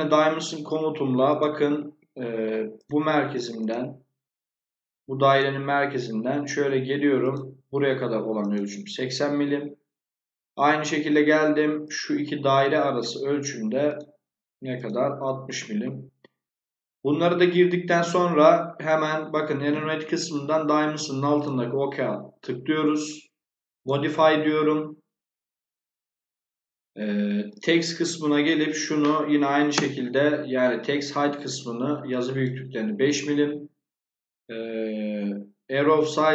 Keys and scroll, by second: 1.7 Escape, 9.4 Escape, 15.3 Escape, 29.3 5, 29.6 Return.